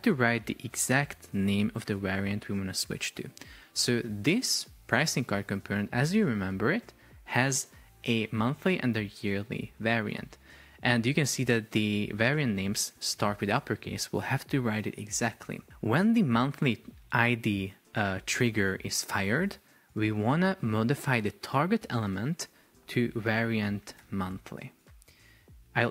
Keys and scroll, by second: 23.5 shift+m, 24.8 Return.